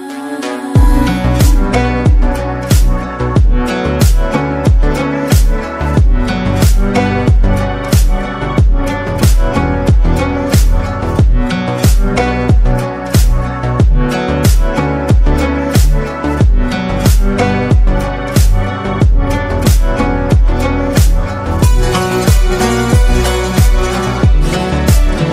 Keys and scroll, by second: 5.6-7.1 shift+Down, 13.1 ctrl+t, 20.0 ctrl++, 20.0 ctrl+-, 20.1 ctrl+-, 20.2 ctrl+-, 20.7 ctrl+-, 20.9 ctrl+-.